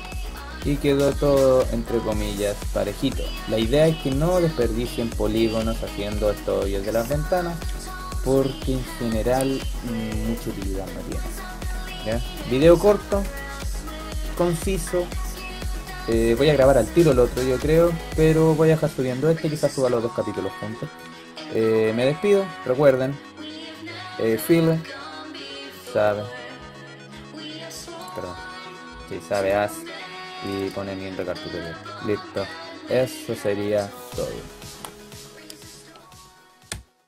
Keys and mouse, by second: 0.8 middle click, 1.4-2.1 middle drag, 5.2 KP_5, 5.4 KP_3, 24.2-29.4 drag, 31.1-31.8 drag, 31.8-33.5 middle drag.